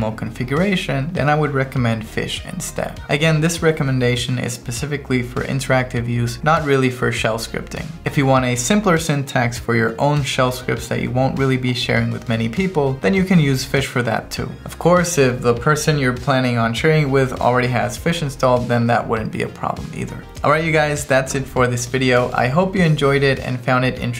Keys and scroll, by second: 0.8 Tab, 1.8 Down, 2.3 Right, 2.7 Down, 2.9 Up.